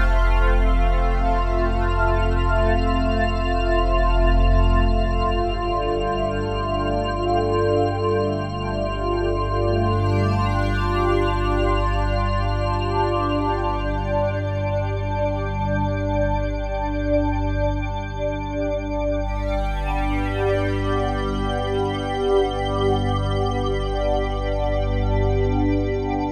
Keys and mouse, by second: 1.0 ctrl+s, 1.6 ctrl+alt+click, 3.4-4.4 drag, 6.2 g, 7.7 click, 8.7 ctrl+alt+drag, 9.1-10.6 drag, 10.7 g, 12.7 click, 14.3-15.8 drag, 15.9 click, 16.8 click, 19.2-25.3 drag, 20.1 typing, 24.7-26.3 typing.